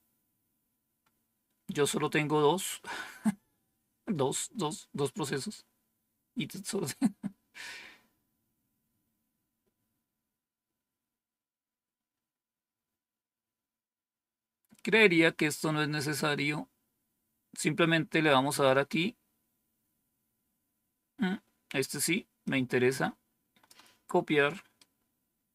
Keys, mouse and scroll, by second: 11.5-12.2 scroll down 1, 16.7-17.6 scroll down 1, 22.3-23.6 drag, 24.7 right click.